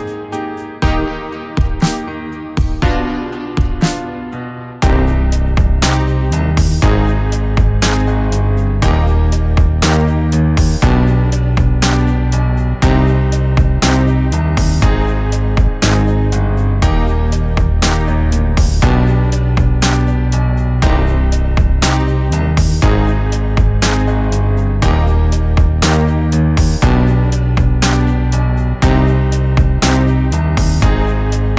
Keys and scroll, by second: 2.0 ctrl+t, 3.4 ctrl+t, 6.8 ctrl+z, 9.3 [, 14.9 Down, 14.9 Down, 22.8 ctrl+t, 27.9 ctrl+z, 30.7 [, 31.2 ctrl+z.